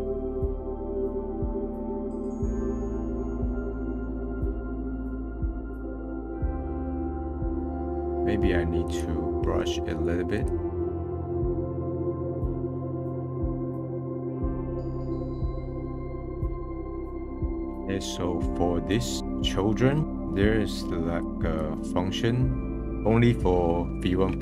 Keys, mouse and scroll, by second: 0.6 click, 0.7 middle click, 1.0 scroll up 2, 1.2 click, 2.2 middle click, 2.4 click, 3.1 middle click, 3.3-5.1 drag, 5.1 middle click, 5.5 middle click, 5.6 scroll up 1, 6.3 click, 7.0 middle click, 7.1-7.6 scroll down 2, 7.2 middle click, 7.6 middle click, 7.9-8.9 middle drag, 8.9 click, 9.4 middle click, 10.3-10.9 drag, 10.9 f, 11.0 click, 11.3 ctrl+z, 11.4 click, 11.9 middle click, 12.1 click, 12.2 middle click, 12.3 click, 12.5 middle click, 12.6 click, 12.9 middle click, 13.1 click, 13.2 middle click, 13.3 click, 13.5 middle click, 13.6 click, 13.9 middle click, 14.0 click, 14.2 middle click, 14.3 click, 15.0 middle click, 15.1-15.6 drag, 15.5 middle click, 15.6 middle click, 15.6 click, 16.2 middle click, 16.4 middle click, 17.2 scroll up 1, 17.5-19.4 middle drag, 19.4 scroll down 1, 19.7 middle click, 20.0 scroll up 7, 21.2-22.8 drag, 22.8-23.9 middle drag.